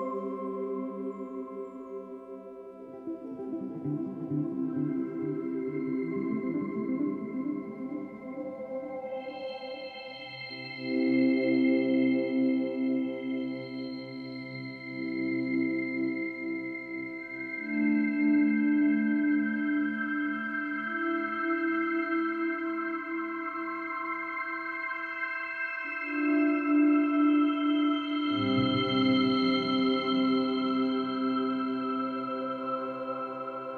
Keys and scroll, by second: 2.2 ctrl+alt+shift+n, 2.3 ctrl+alt+g, 22.9 ctrl+-, 23.4 ctrl+-, 26.0 ctrl+=, 26.6 ctrl+-, 28.0 space, 30.0 ctrl+e.